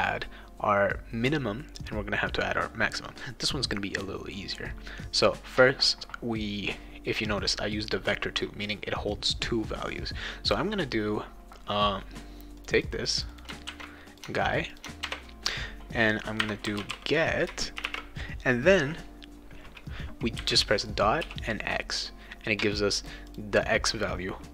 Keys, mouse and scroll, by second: 12.6 click, 12.7 click, 13.1 click, 13.3 click, 13.6 ctrl+c, 14.1 click, 14.7 click, 15.1 ctrl+v, 16.1-17.8 typing, 20.4 ., 21.2 x, 23.0 click, 23.2 click.